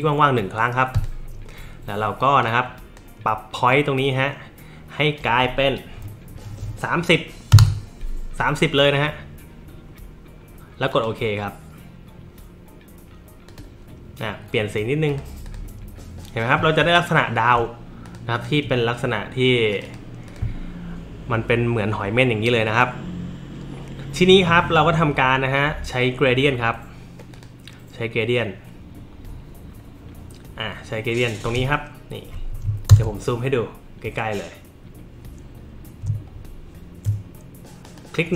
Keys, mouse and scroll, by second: 0.9 click, 2.4 click, 7.5 KP_3, 7.6 KP_0, 10.9 click, 13.5 click, 15.1 click, 15.5 click, 16.8 alt+middle click, 18.1 click, 18.4 click, 19.7 click, 20.3 click, 27.3 click.